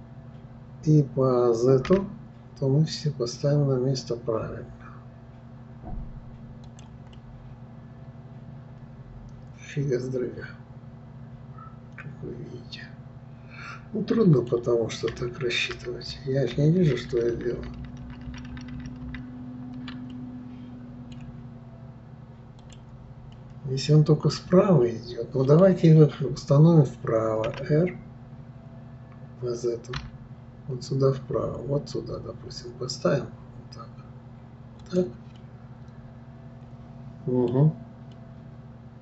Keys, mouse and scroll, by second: 7.1-10.2 middle drag, 15.9 ctrl+z, 16.2-17.8 ctrl+z, 20.1-22.6 middle drag, 22.6 click, 23.3-26.4 middle drag, 35.4-39.0 middle drag.